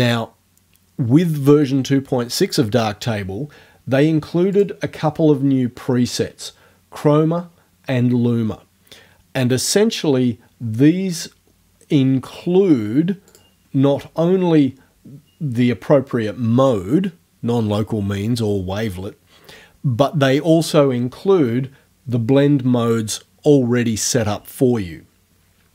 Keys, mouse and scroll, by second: 4.6 click, 13.3 click.